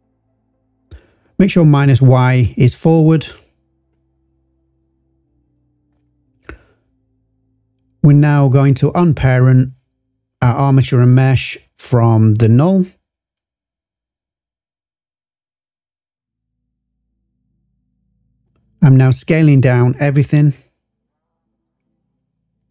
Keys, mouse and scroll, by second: 0.2 scroll down 2, 1.0 click, 1.6 scroll down 2, 2.3 click, 2.8-3.8 scroll up 3, 5.9 click, 6.7 shift+click, 8.0 click, 8.5 click, 9.2 click, 11.3 alt+p, 14.2 click, 14.6 Delete, 15.4 click, 17.1 shift+click, 18.1 s, 21.5 click.